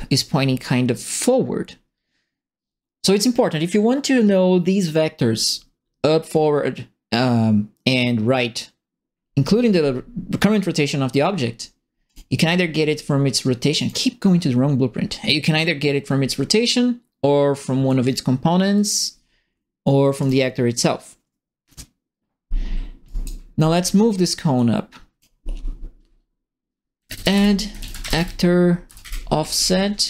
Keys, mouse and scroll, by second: 12.0 click, 13.7 click, 15.2 right click, 17.8 click, 18.7 click, 20.2 click, 23.0 right click, 24.5 click, 26.7-30.0 typing.